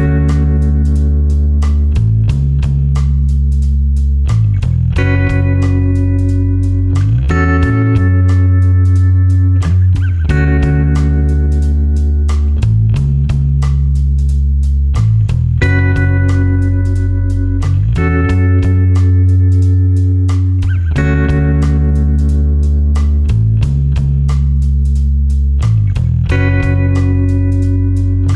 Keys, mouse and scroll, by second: 0.4 space, 0.6 click, 1.1 space, 1.6 click, 3.4 Delete, 4.2 space, 4.4 click, 4.8 space, 5.8 click, 12.6 click, 13.4 space, 13.7 ctrl+click, 14.9 ctrl+click, 18.2 super+KP_Add, 18.9 super+KP_Subtract, 20.1 click, 23.4 click, 23.8 space, 24.0 ctrl+click, 24.4 space, 25.4 click.